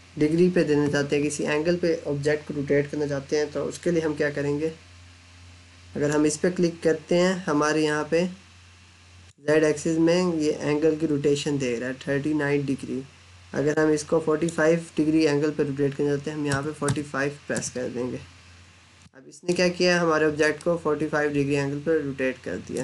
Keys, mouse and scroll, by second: 6.1 click, 13.4 click, 16.3 4, 17.4 Return, 18.9 middle click, 20.5 middle click.